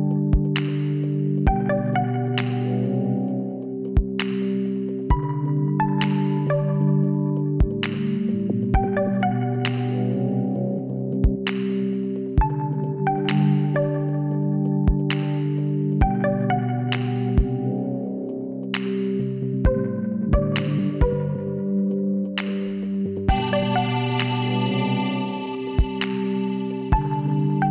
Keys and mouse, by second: 1.0 click, 1.4 z, 4.7 shift+s, 5.2 click, 7.8 shift+a, 13.4-15.9 drag, 15.0 t, 16.4 t, 17.4 s, 21.7 r, 24.8 s, 26.6 KP_1, 27.3-27.7 middle drag.